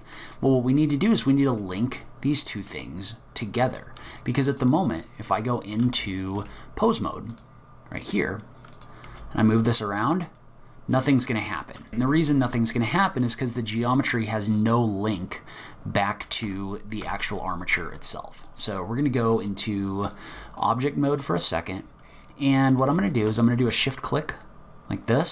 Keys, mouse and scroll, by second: 1.1-1.8 scroll down 3, 1.6 middle click, 3.1-4.0 scroll up 6, 4.0-4.3 scroll down 2, 4.2-4.5 scroll up 2, 4.5 click, 5.0 scroll down 1, 5.2-5.5 scroll up 1, 5.7 scroll down 1, 6.1 shift+middle click, 7.3 click, 8.7 click, 9.1 g, 12.2-13.1 scroll up 5, 13.2 click, 16.4 Tab, 17.0 Tab, 18.4 click, 20.6 click, 23.1 shift+click.